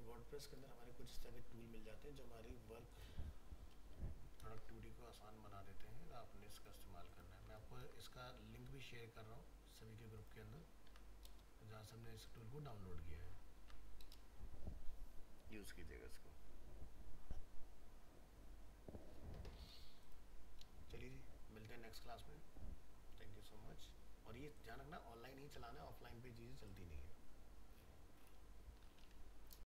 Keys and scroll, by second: 4.4 ctrl+c, 7.8 ctrl+v.